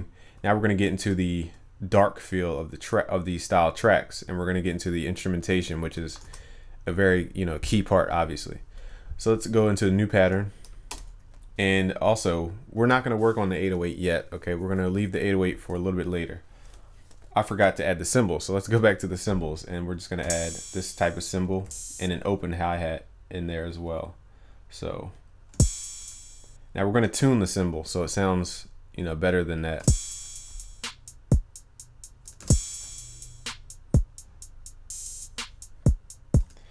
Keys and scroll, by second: 6.3 ctrl+s.